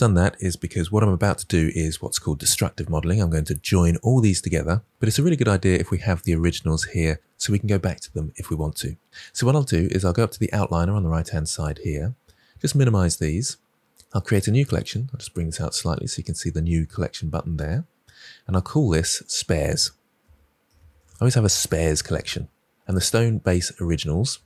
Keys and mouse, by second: 11.3 click, 12.5 click, 14.9 click, 19.0 click, 19.2-21.5 drag.